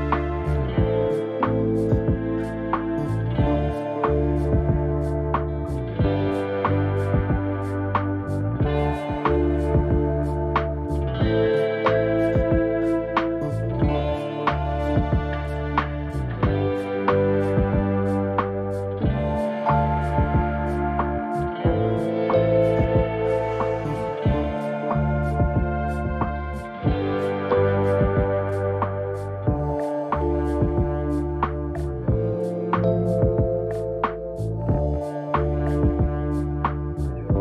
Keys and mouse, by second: 1.1 click, 3.0 click, 4.7 click, 9.8-13.0 drag, 13.4 z, 14.4 z, 18.0-30.2 drag, 36.0 click.